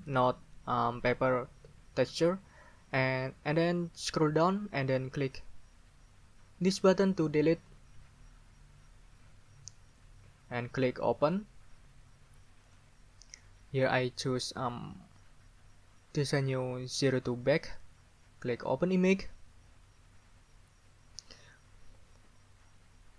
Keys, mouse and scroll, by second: 4.3-5.0 scroll down 4, 5.3-6.2 scroll down 6, 9.9 middle click, 10.0 click, 11.2 click, 11.4 middle click, 12.6 middle click, 17.5 middle click, 18.6 middle click.